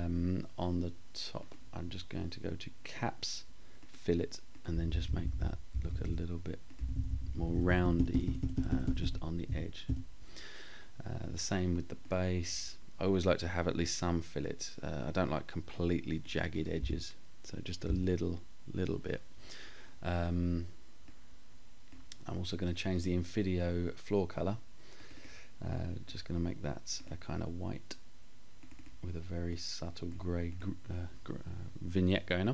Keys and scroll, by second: 3.8 scroll down 1, 4.7 Up, 5.8 Down, 16.2 Up.